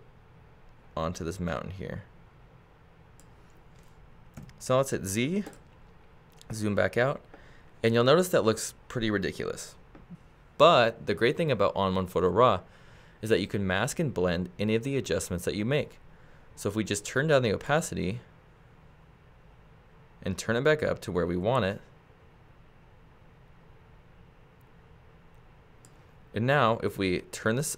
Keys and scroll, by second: 4.4 z.